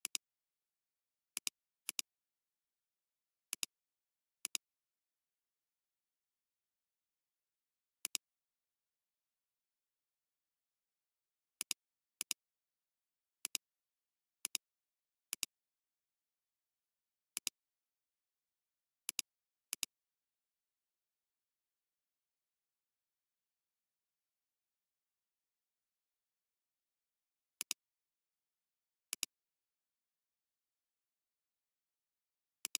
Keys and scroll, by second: 25.9 space.